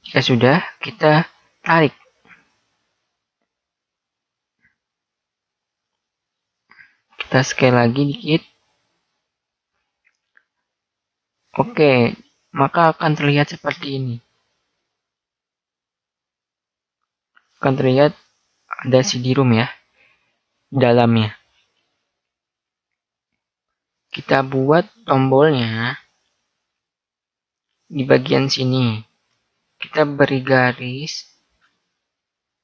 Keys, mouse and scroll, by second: 0.8 middle click, 2.5 click, 7.3 s, 8.6 click, 12.6 a, 12.9 middle click, 13.2 middle click, 15.7 right click, 17.4 a, 23.5-25.0 middle drag, 26.5-28.2 middle drag, 29.6 ctrl+r.